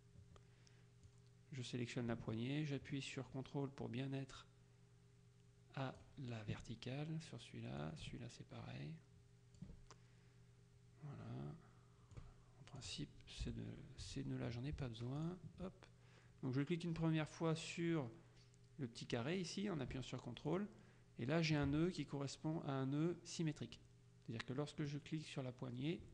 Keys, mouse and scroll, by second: 1.1-6.6 drag, 7.9-10.2 ctrl+drag, 12.3 click, 13.5 Delete, 15.3 ctrl+click, 20.6 ctrl+click, 24.9-26.1 drag.